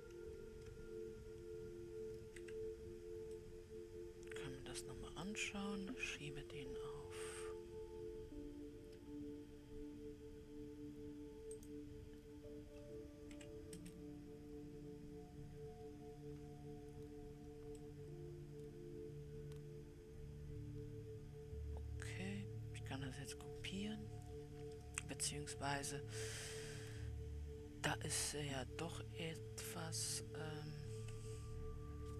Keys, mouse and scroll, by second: 0.9 Tab, 2.9 w, 3.8-12.0 middle drag, 12.0-18.4 drag, 18.4-23.6 middle drag, 26.3-27.3 scroll up 2, 31.2 KP_7.